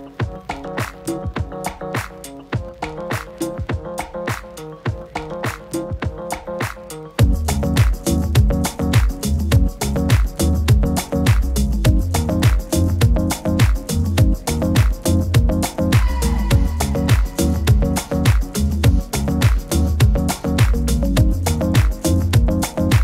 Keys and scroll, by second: 16.8 super++, 17.0 super++, 17.4 super++.